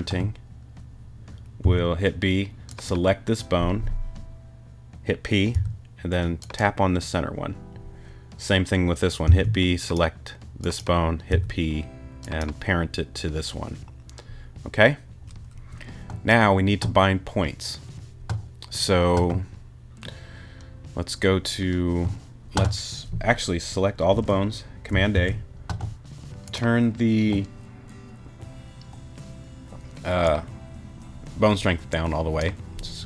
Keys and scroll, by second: 1.6 b, 5.5 p, 9.3 b, 11.3 p, 25.1 super+a.